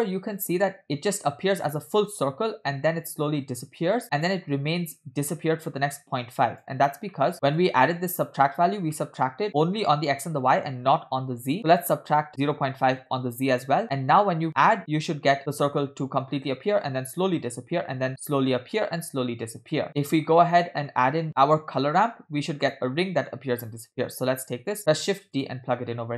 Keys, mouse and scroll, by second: 7.2 middle click, 7.4 middle click, 7.7 scroll up 2, 8.2 click, 9.0 middle click, 11.6-13.0 drag, 13.8 middle click, 14.1-14.5 scroll up 2, 14.5-19.9 shift+drag, 20.1-20.5 scroll down 4, 20.5-20.9 middle drag, 21.3 click, 21.3-21.9 scroll up 3, 22.7 click, 23.1 middle click, 24.7 shift+d.